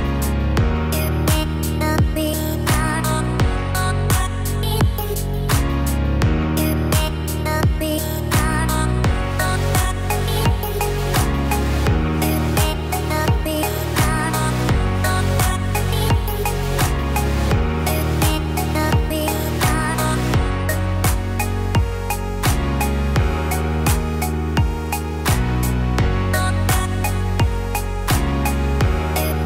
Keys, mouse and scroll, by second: 1.0 shift+s, 5.7-6.4 scroll down 1, 6.4 scroll down 3, 7.1 scroll down 2, 7.5-9.5 scroll down 1, 9.5-10.2 scroll down 1, 11.5 Tab, 13.2 click, 17.9-19.5 scroll up 4, 19.5 Tab, 19.5-21.2 scroll up 1, 23.3 click, 27.0 shift+s.